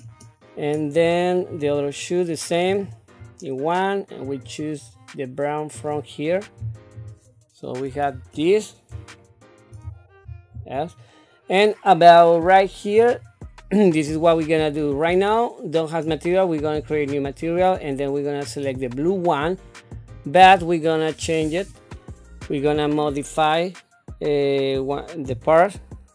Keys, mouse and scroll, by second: 1.5 click, 2.7 click, 4.2-6.0 drag, 7.0 click, 8.0 KP_7, 9.2 shift+middle click, 10.3 ctrl+s, 13.0 click, 16.6 click, 18.4-20.2 drag.